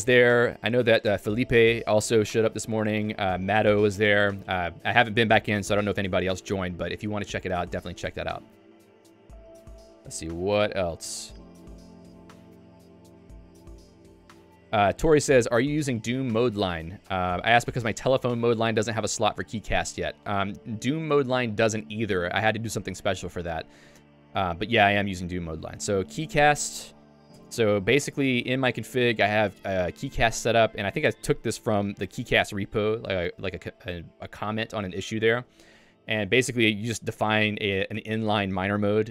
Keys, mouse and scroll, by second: 27.4 Return, 28.3-29.2 typing, 30.8 Escape, 31.0 k, 32.1 shift+v, 35.6 Escape, 36.2 j, 36.8 k, 37.2 shift+v, 38.0 j.